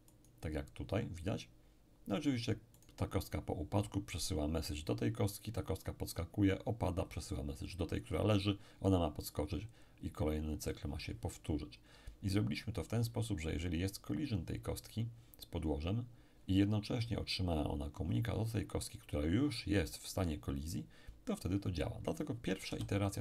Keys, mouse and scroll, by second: 0.1-1.2 right drag, 2.8-3.8 right drag, 22.7 p.